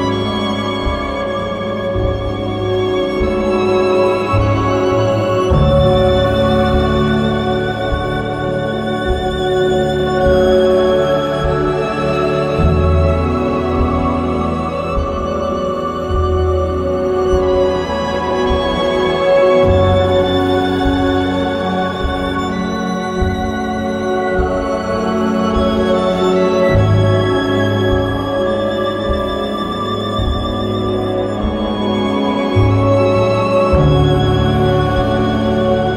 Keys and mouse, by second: 3.8 click, 4.7 click, 5.4 click, 6.7 click, 8.2 click, 8.9 click, 9.6 click, 11.8 click, 13.1 click, 13.9 click, 15.1 click, 15.8 click, 16.8 click, 18.2 click, 19.0 click, 20.3 click, 21.3 click, 22.8 click, 26.6 click, 27.9 click, 29.1 click, 30.1 click, 31.9 click, 33.9 click.